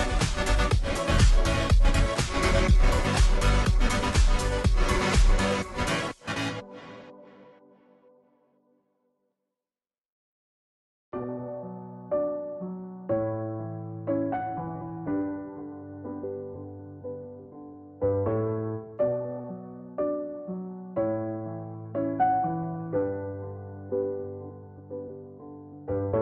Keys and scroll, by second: 23.1-24.6 Left.